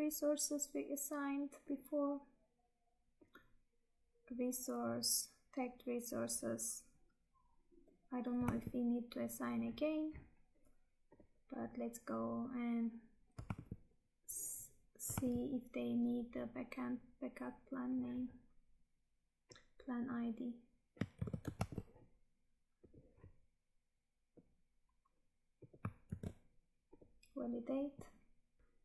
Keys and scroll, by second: 8.5 Tab, 13.6 Tab, 15.2 Tab, 21.1 ctrl+c, 21.6 Tab, 26.0 ctrl+v.